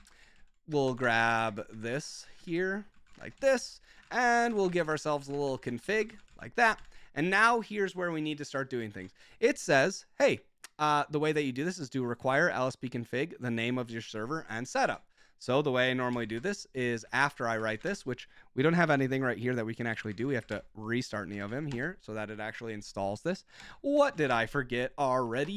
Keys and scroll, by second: 0.0-1.3 typing, 1.4 ctrl+shift+Left, 1.8 ctrl+shift+Left, 2.0 ctrl+c, 2.4 super+j, 2.9 ctrl+shift+v, 3.2-7.2 typing, 3.5 Return, 8.9 super+j, 14.9 super+j, 16.0 Escape, 16.4-18.2 typing, 16.7 Escape, 19.9 Escape, 19.9-22.1 typing, 23.5 Return, 23.8-25.5 typing.